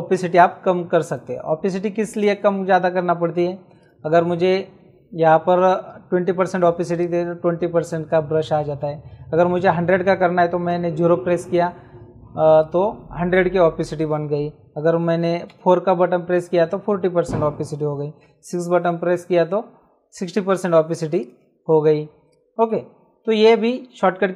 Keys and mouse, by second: 0.7 space, 0.9 click, 2.1 click, 3.0 space, 3.7 click, 6.9 click, 10.7 KP_0, 12.5 click, 15.5 KP_4, 18.2 KP_6, 20.9 space, 21.1 click, 22.2 click.